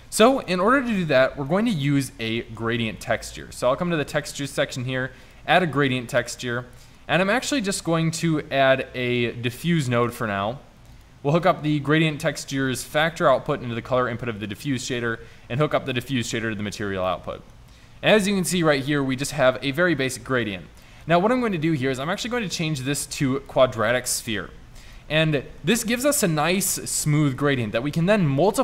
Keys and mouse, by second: 2.5 shift+a, 6.6-7.8 drag, 7.8 shift+a, 17.1 middle drag, 20.4 middle drag, 23.2-24.4 middle drag.